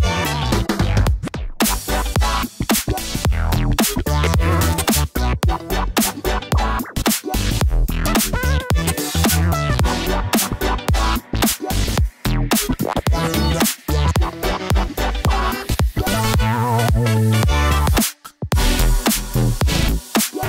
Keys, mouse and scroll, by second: 1.9-2.6 middle drag, 3.3-4.9 drag, 11.9-14.4 middle drag, 16.0 click, 18.3 click, 18.4-19.6 ctrl+drag, 20.0 click.